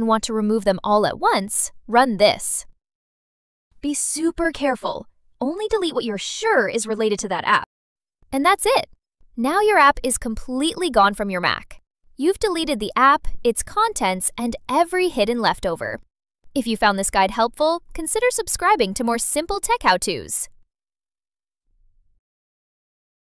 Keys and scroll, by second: 1.9 super+v, 4.3 super+a, 4.6 super+c, 5.8 super+v, 8.4 Return.